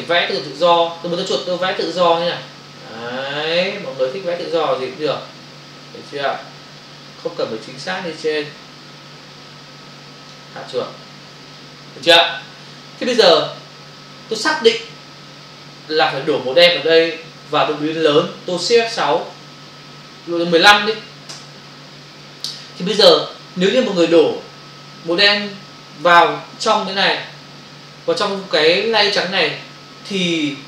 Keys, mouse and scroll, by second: 1.5 click, 19.3 shift+F6, 20.4 typing, 21.3 Return.